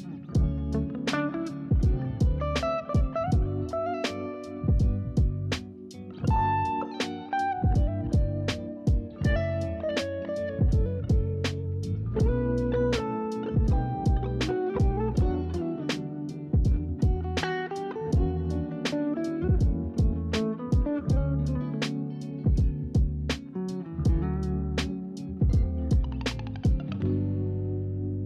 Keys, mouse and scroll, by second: 0.8 click, 1.1 scroll down 1, 1.2-6.0 middle drag, 6.0-6.6 scroll up 2, 9.1 click, 9.9 click, 10.2 scroll down 2, 10.4-11.7 middle drag, 12.6 shift+a, 13.1-14.0 scroll down 2, 14.0-15.5 middle drag, 15.5-16.7 s, 17.1 s, 17.6 s, 17.9 click, 19.3-19.8 scroll down 2, 19.8 scroll up 2, 21.6 KP_0, 25.5 click.